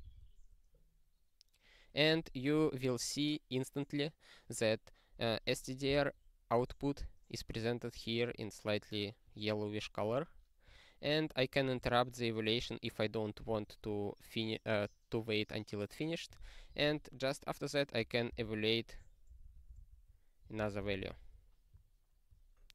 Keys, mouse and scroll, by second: 1.1 ctrl+e, 10.6 click, 11.7 ctrl+n, 13.9 ctrl+b, 16.7 ctrl+n, 16.8 ctrl+n, 18.9 ctrl+e, 21.0 ctrl+b.